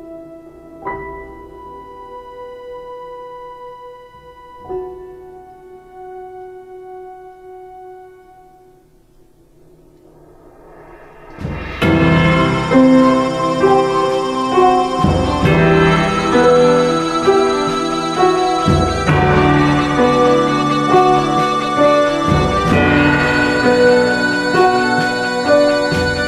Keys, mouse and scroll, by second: 2.6 ctrl+space, 11.1 ctrl+space.